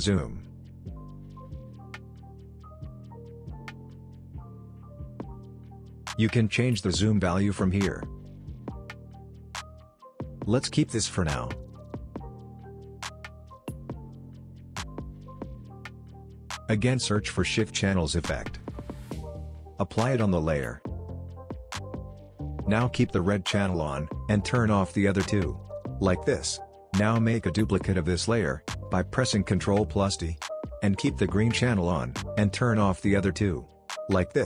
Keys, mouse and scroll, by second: 2.1-2.5 scroll down 1, 2.5-3.0 scroll up 1, 3.0-3.3 scroll down 1, 3.3 space, 3.5-4.1 click, 3.8 space, 4.1-4.8 scroll up 1, 4.8 space, 4.9-5.8 click, 5.3 space, 6.9-10.3 drag, 11.3-11.7 scroll down 1, 11.7 ctrl+click, 11.9-12.4 scroll down 1, 12.4-13.8 scroll up 1, 13.8 click, 17.9 click, 18.2-19.6 typing, 20.3 click, 23.7 click, 28.8 ctrl+d, 30.7 click.